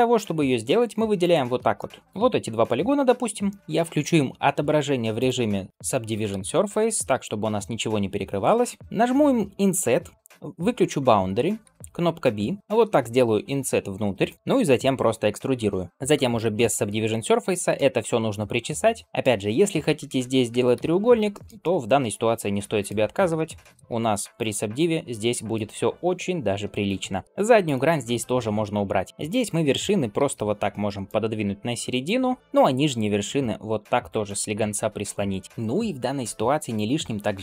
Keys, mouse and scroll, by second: 1.0 shift+click, 1.6 middle click, 3.3 middle click, 3.6 ctrl+space, 5.0-5.7 drag, 6.2 ctrl+space, 6.8 shift+middle click, 7.2-8.3 middle drag, 10.1 i, 14.3 middle click, 15.6 e, 15.9 click, 16.0 ctrl+space, 16.6 shift+middle click, 16.9 middle click, 17.9 shift+middle click, 18.5 middle click, 19.0 middle click, 19.0 scroll down 1, 19.2 scroll up 2, 20.6 ctrl+x, 21.2 shift+middle click, 21.5-22.7 middle drag, 22.9 scroll down 2, 23.3 ctrl+space, 24.2 click, 24.8-25.1 scroll up 1, 25.1-26.8 middle drag, 27.5 click, 27.9 x, 29.6 click, 30.0 g, 31.2 middle click, 31.9 click, 32.4 KP_3, 32.9 g, 33.9 click, 34.3 g, 35.5-36.6 scroll up 2, 36.6 click, 37.0 scroll down 1.